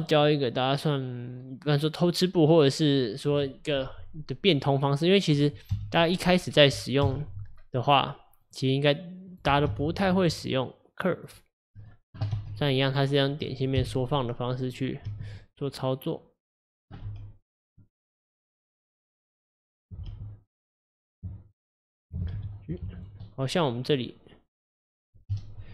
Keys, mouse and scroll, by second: 0.3-3.3 middle drag, 5.8 KP_1, 7.1 KP_7, 8.5 click, 9.3 click, 9.7 g, 11.6 click, 12.4 s, 13.8 KP_1, 15.1 g, 17.1 s, 20.1 g, 21.3 scroll up 2, 22.0 click, 22.4 g, 23.3 middle click, 23.7-24.6 scroll down 1, 25.3 KP_Divide.